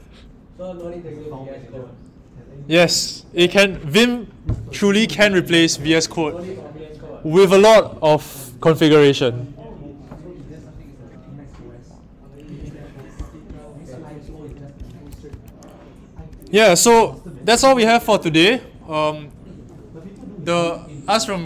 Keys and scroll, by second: 16.1 Down, 16.1 Up.